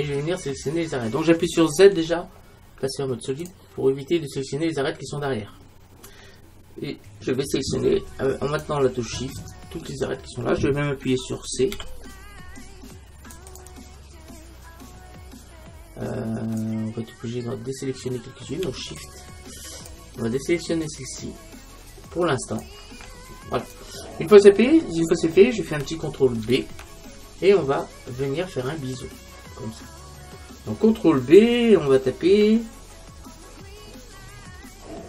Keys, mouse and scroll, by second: 2.0 z, 5.6-7.4 middle drag, 8.6-11.8 right drag, 11.8 c, 15.3 c, 23.8-25.5 right drag, 26.5 ctrl+b.